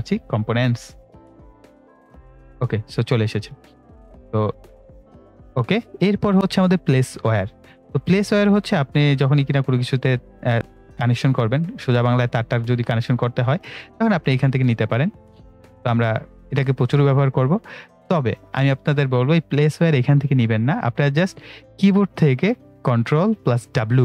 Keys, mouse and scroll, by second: 2.0 click, 10.5 click, 18.8 right click, 20.7 click, 23.9 ctrl+w.